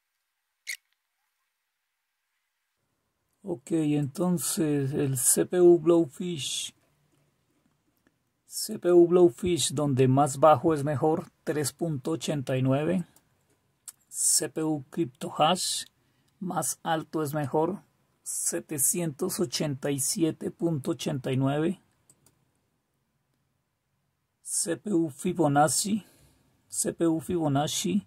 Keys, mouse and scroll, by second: 0.8-2.0 typing.